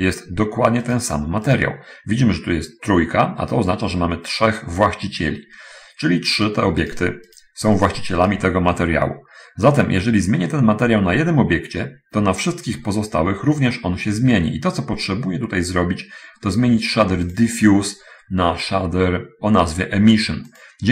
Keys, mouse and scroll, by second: 1.8 right click, 4.9 click, 6.7 right click, 7.2-7.9 right drag, 8.1 right click, 8.5 right click, 17.6 click.